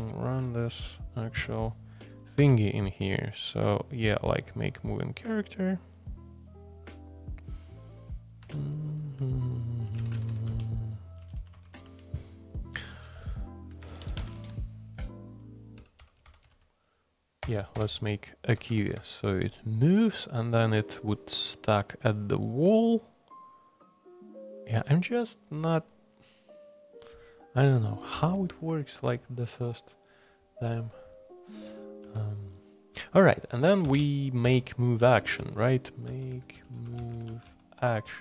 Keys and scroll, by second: 0.0-1.0 typing, 2.4 Escape, 8.4 Escape, 9.6-12.1 typing, 13.2-18.9 typing, 17.4 Return, 17.8 Return, 33.8 ctrl+r, 33.8-38.0 typing.